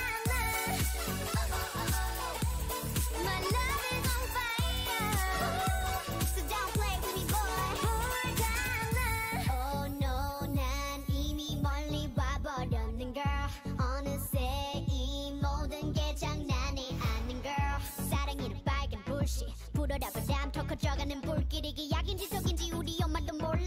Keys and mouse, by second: 2.7 middle click, 4.4 middle click, 6.2-8.2 middle drag, 8.2 right click, 8.3-10.1 drag, 9.7 ctrl+e, 10.7 a, 17.7 k.